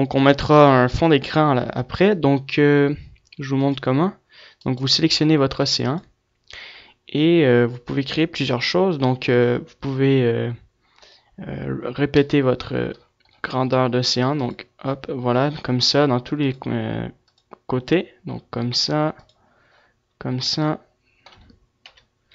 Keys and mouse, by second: 0.9-3.6 middle drag, 3.6 click, 4.6-6.9 middle drag, 6.9-10.6 drag, 14.2-20.6 drag, 21.7 KP_1.